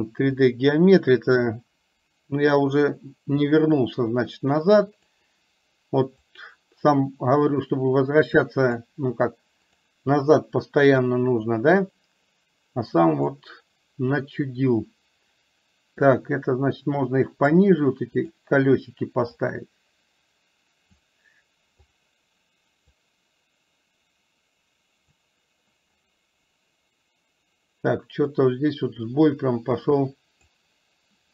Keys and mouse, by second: 3.6-5.2 drag, 6.3-8.8 drag, 9.8 click, 11.1-13.5 drag, 16.2-17.7 drag, 19.3-21.1 drag, 23.1-25.3 drag, 28.3-30.6 drag.